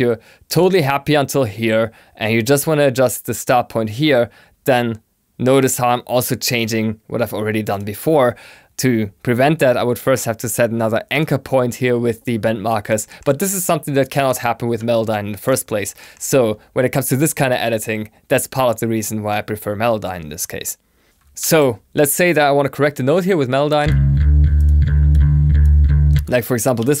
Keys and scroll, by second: 21.3 super+m.